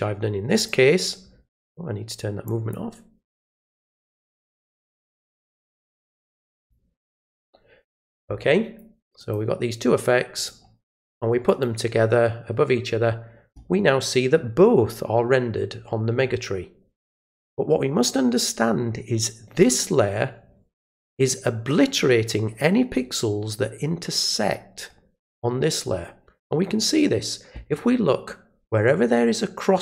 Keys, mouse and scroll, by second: 0.5 click, 2.4 click, 5.4 click, 6.4 click, 9.2 click, 10.3 click, 11.4 click, 19.6 click.